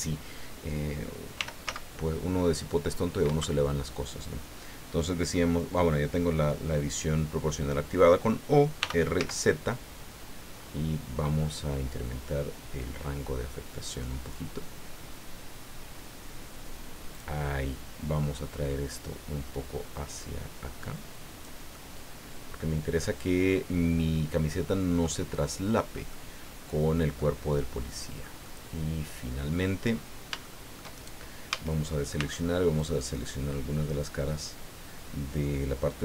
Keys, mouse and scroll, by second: 1.3 r, 1.6 z, 3.2 Escape, 8.8 r, 9.1 z, 10.5-10.9 scroll up 2, 11.4 scroll down 2, 12.1 scroll down 2, 17.1 click, 18.9-21.6 drag, 21.7-25.2 middle drag, 26.1-27.1 middle drag, 27.2-28.4 middle drag, 28.4-29.9 middle drag, 30.4 shift+middle click, 31.5 a, 32.2 c, 32.8-36.0 drag.